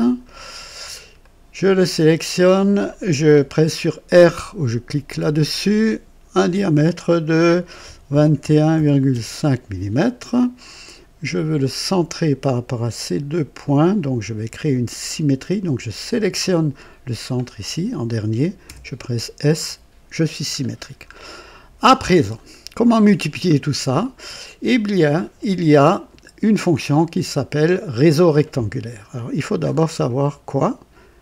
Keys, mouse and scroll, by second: 0.6-0.9 scroll up 2, 1.1 right click, 2.3 click, 5.0 r, 7.7 KP_2, 8.0 KP_1, 8.4 KP_Decimal, 8.6 KP_5, 9.0 KP_Enter, 11.6 click, 11.6-12.4 typing, 13.5 click, 15.9 click, 16.9-18.7 typing, 20.5-20.9 scroll down 1, 21.3-22.0 right drag, 22.1-22.5 scroll down 1, 23.5 scroll down 1, 23.9-24.6 right drag, 24.8-25.5 typing, 29.5-29.9 scroll up 2.